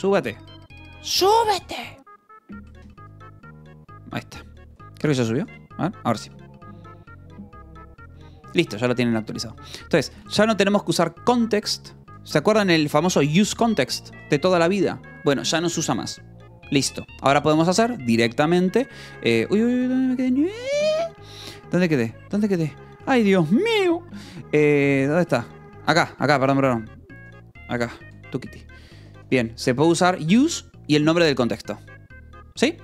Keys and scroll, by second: 1.7 Escape, 3.3 q, 4.3 space, 4.5 g, 5.9 shift+p, 8.4 q, 9.0 j, 10.6 shift+v, 11.9 Escape, 12.1-14.6 typing, 17.6 Escape, 18.2 f, 19.3 Escape, 24.9 j, 25.3 k, 27.2 f, 28.0 u, 28.5 f, 29.8 v, 30.4 e.